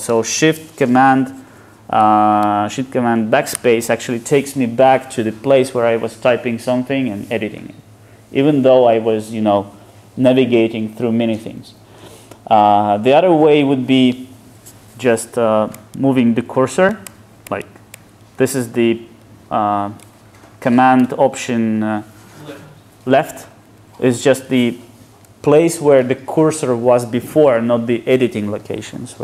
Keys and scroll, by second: 3.6 ctrl+shift+super+BackSpace, 17.2 alt+super+[, 23.7 alt+super+[.